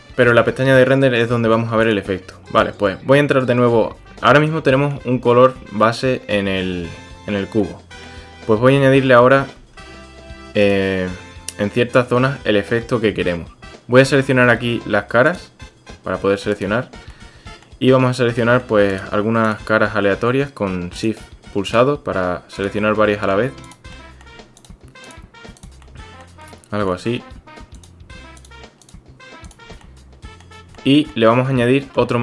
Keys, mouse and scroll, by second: 1.8 click, 2.6-3.5 drag, 4.4-4.9 drag, 7.6-8.1 drag, 8.8-9.4 drag, 9.6 Tab, 15.3 click, 16.5 click, 17.1-17.7 drag, 18.4 click, 18.9 shift+click, 21.0 shift+click, 23.0-23.3 drag, 23.9-24.2 drag, 24.6 shift+click, 25.0 shift+click, 25.8-26.2 drag, 26.4-26.9 drag, 28.4 shift+click, 28.8 shift+click, 29.4 shift+click, 29.9-30.4 drag, 31.1-32.0 drag.